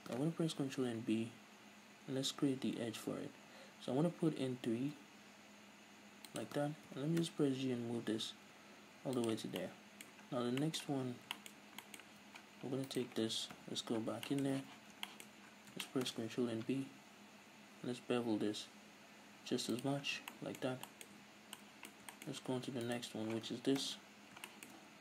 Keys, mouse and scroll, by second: 0.7 ctrl+b, 4.7 click, 6.4 click, 6.9 g, 9.2 shift+click, 9.4 scroll down 1, 9.6-12.2 middle drag, 10.2-10.6 scroll down 1, 11.0 scroll down 1, 11.5 scroll up 1, 12.0 z, 12.7 middle click, 12.8 right click, 13.5 KP_7, 14.2-19.8 shift+middle drag, 14.5 z, 14.8-15.8 scroll up 4, 16.6 ctrl+b, 19.8 click, 20.0-22.9 shift+middle drag, 20.0 scroll down 2, 21.1 a, 22.9 right click, 23.8 KP_7, 24.4-25.0 shift+middle drag, 24.7-25.0 scroll up 2.